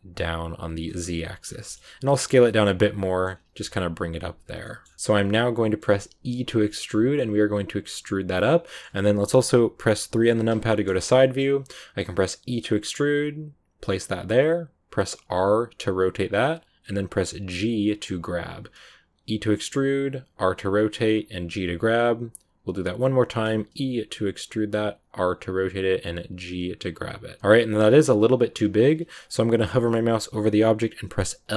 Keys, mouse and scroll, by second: 0.8 scroll up 1, 0.8-1.9 middle drag, 1.9 s, 2.7 middle click, 3.3 g, 4.5 middle click, 4.8 s, 4.9-6.1 shift+middle drag, 6.1 e, 8.5 scroll up 1, 8.6-10.1 middle drag, 10.1 KP_3, 10.9 click, 11.1 shift+middle click, 11.3 scroll up 1, 12.4 e, 27.4 middle click, 27.7 scroll up 9, 28.5-31.4 scroll up 1, 31.4 l.